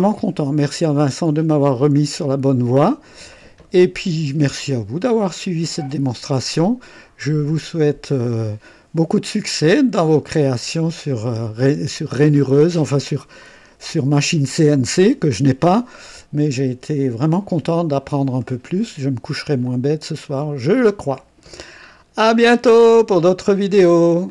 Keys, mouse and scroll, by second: 0.1-1.0 drag, 1.4 click, 2.3 click, 3.1-8.2 drag, 9.6-10.9 drag, 15.9-17.7 drag, 17.9-19.0 drag, 19.6-21.1 drag, 22.8 right click, 24.2 click.